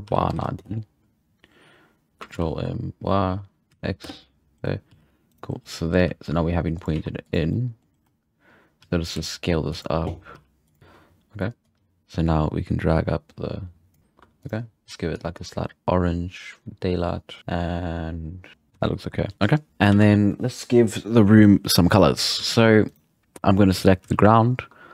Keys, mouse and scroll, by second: 2.3 ctrl+m, 4.9 g, 6.0 g, 6.9 s, 7.5-7.9 middle drag, 8.8 g, 9.1 s, 10.3 g, 10.8 z, 11.6-14.0 drag, 14.4 click, 18.5 alt+a, 18.7 z, 19.9 alt+a, 22.4 z, 22.9-23.3 right drag, 24.1 z.